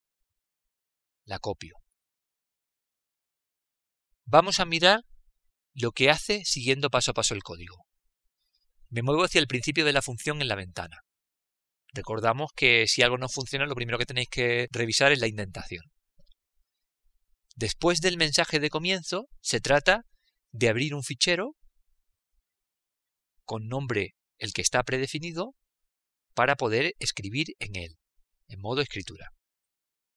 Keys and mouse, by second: 2.7 click, 3.9 ctrl+v, 5.0-7.4 middle drag, 11.8 click, 19.9-25.5 drag.